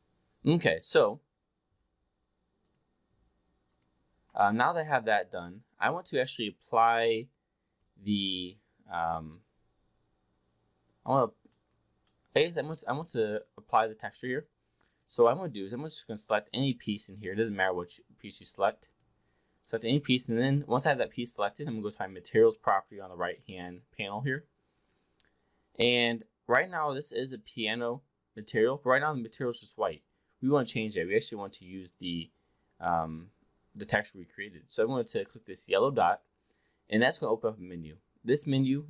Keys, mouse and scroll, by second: 3.6 click, 4.4-5.9 alt+drag, 7.8-11.1 alt+drag, 11.5 alt+middle click, 11.9-12.2 alt+middle drag, 12.4-13.8 alt+drag, 14.0 drag, 14.8 click, 15.7 click, 16.2 click, 16.8 click, 17.4 click, 18.2 click, 24.8 click, 35.6-38.8 drag.